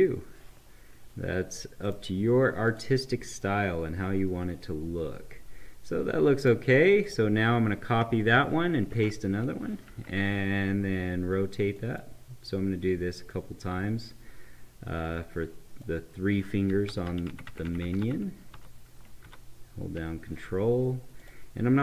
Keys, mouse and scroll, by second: 1.8 right click, 2.7 click, 3.3-7.0 right drag, 7.0 click, 8.3 ctrl+c, 11.7-16.9 drag, 16.9 Right, 19.2 ctrl+Down, 21.2 click.